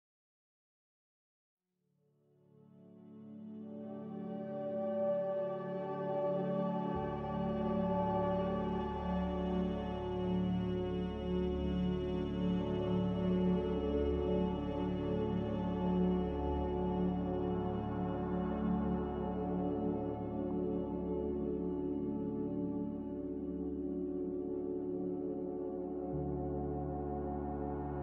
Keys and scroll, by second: 2.0 ctrl+z, 16.8-17.7 typing, 23.1-24.0 typing.